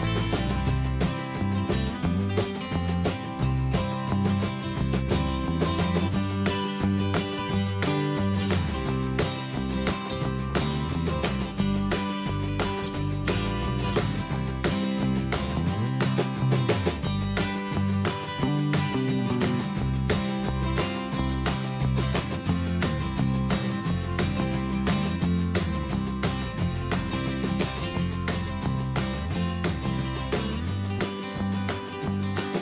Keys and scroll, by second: 7.5 Escape, 30.2 alt+Tab.